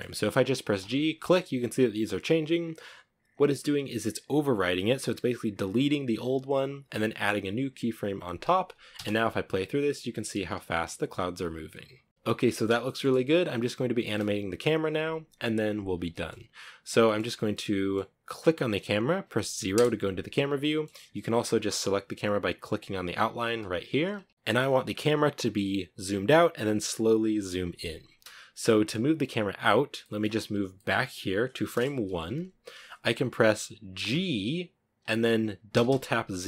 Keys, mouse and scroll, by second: 0.0 g, 2.1 g, 8.1 space, 8.4 scroll down 4, 9.4 shift+middle click, 9.6 scroll up 2, 9.8 a, 10.7 scroll up 2, 11.4 scroll down 2, 12.1-13.2 shift+middle drag, 13.2 space, 15.3-16.3 shift+middle drag, 16.3-16.7 scroll down 2, 16.7-18.0 middle drag, 18.0 right click, 18.9 KP_0, 19.8 shift+middle click, 20.4 a, 20.7-21.3 scroll up 2, 22.0 right click, 22.8 right click, 23.2 scroll down 2, 23.7-30.3 shift+middle drag, 30.3-31.5 drag, 31.5 Right, 33.3 g.